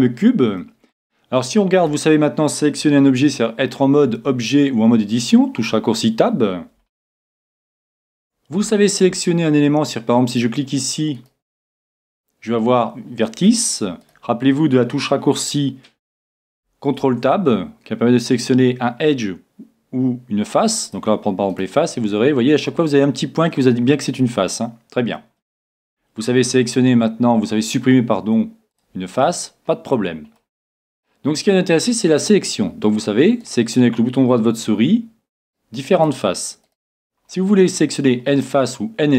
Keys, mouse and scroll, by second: 0.6-1.8 middle drag, 1.8 middle click, 1.8 right click, 2.3-3.6 right drag, 3.6-5.4 middle drag, 4.1 Tab, 6.9-10.3 middle drag, 10.3-13.8 right drag, 14.0-15.9 right drag, 17.0 c, 21.5-23.3 right drag, 21.9-25.4 middle drag, 25.5 middle click, 26.4 x, 29.2-32.7 middle drag, 33.4-35.3 right drag, 35.4-38.4 right drag, 38.2 middle click.